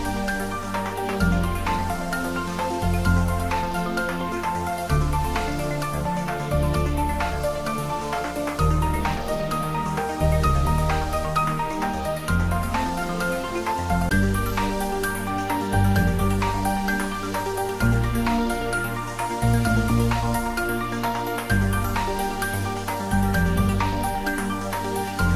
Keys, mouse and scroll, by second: 0.8-1.3 scroll down 1, 3.2 click, 5.3-6.6 scroll down 1, 7.5 Tab, 9.9-14.2 middle drag, 23.2 click.